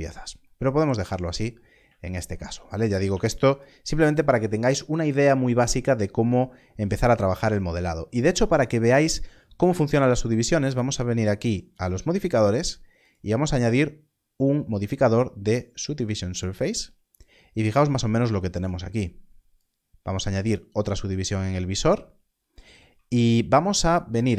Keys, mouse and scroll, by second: 1.3-1.7 scroll down 1, 11.7 click, 16.0 click, 19.5 click, 22.8 click.